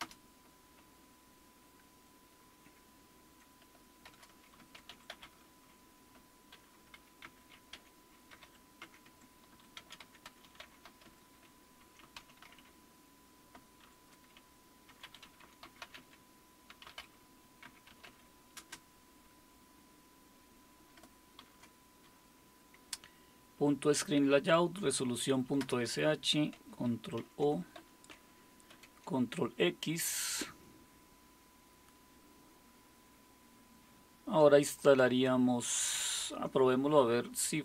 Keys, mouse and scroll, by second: 0.0-0.5 typing, 4.5-18.6 typing, 21.4 typing, 25.6 Return, 27.2 ctrl+o, 27.8 Return, 28.7 ctrl+x, 34.7-37.6 drag.